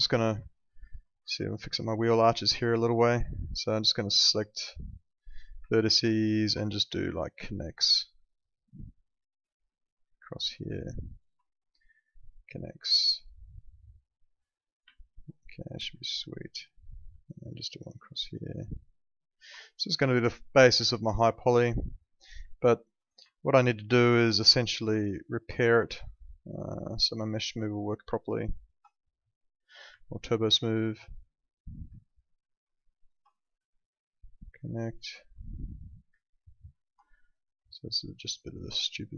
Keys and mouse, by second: 0.6 alt+middle click, 1.4 alt+middle click, 3.1 alt+middle click, 4.0 click, 6.3 ctrl+click, 11.1 ctrl+click, 13.2 alt+middle click, 14.9 alt+middle click, 16.0 alt+middle click, 18.2 click, 19.3 ctrl+click, 20.4 click, 20.8 alt+middle click, 22.5 alt+middle click, 23.3 alt+middle click, 24.5 click, 26.6 click, 28.6 ctrl+click, 30.0 alt+middle click, 31.4 click, 32.9 ctrl+click, 36.7 ctrl+click.